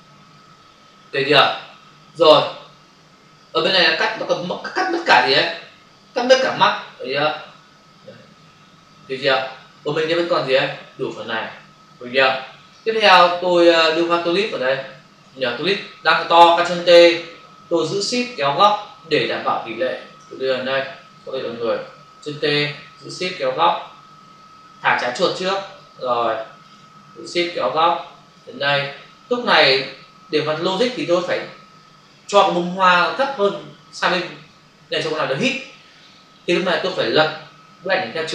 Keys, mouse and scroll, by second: 13.9 click, 14.8 click, 19.8 shift+click, 21.3 Escape, 23.5 shift+click, 25.7 click, 27.5 shift+click, 29.1 click.